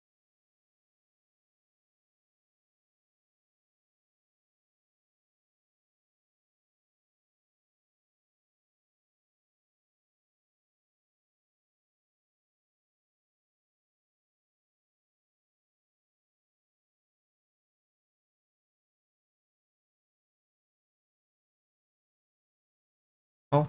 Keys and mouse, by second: 0.1-1.5 middle drag, 2.0-2.9 alt+middle drag, 5.8 click, 8.0 click, 9.1 click, 9.7 click, 11.2 shift+v, 12.2 click, 13.1 click, 13.6 shift+v, 15.7 shift+v, 16.5 click, 17.2 click, 17.9-19.1 middle drag, 20.1 middle click, 23.1 2.